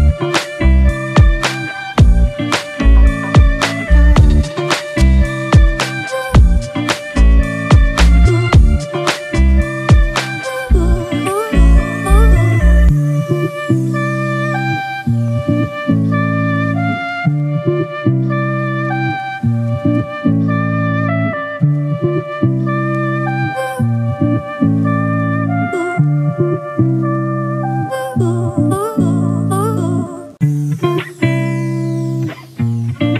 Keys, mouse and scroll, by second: 1.9 double click, 4.7 double click, 12.5 double click, 13.9-15.0 typing, 15.3 double click.